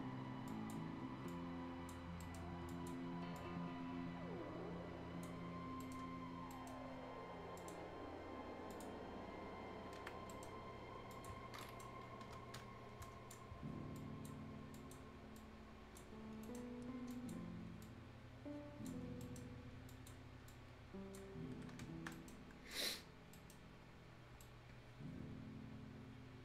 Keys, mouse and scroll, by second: 0.4 click, 2.0 scroll down 1, 2.4 scroll up 1, 2.6-5.7 drag, 5.7 right click, 6.0 scroll down 1, 6.5 right click, 6.7 scroll up 1, 7.5 click, 7.8 scroll up 1, 8.7 click, 10.0 Escape, 10.1 scroll down 1, 10.2 right click, 10.5-11.1 scroll up 1, 11.1 click, 11.4 scroll down 1, 11.6 right click, 12.3 F10, 12.3 scroll up 1, 13.0 click, 13.4 scroll up 1, 13.9 click, 16.0 scroll down 1, 16.2-17.1 scroll up 2, 16.4 right click, 17.1 click, 19.0 scroll down 1, 19.2 right click, 19.9 click, 21.2-22.1 scroll down 3, 21.5 Escape, 21.8 Escape, 22.1 right click, 22.3-22.7 scroll up 1, 22.7 right click, 23.0 scroll down 1, 23.3-26.4 right drag.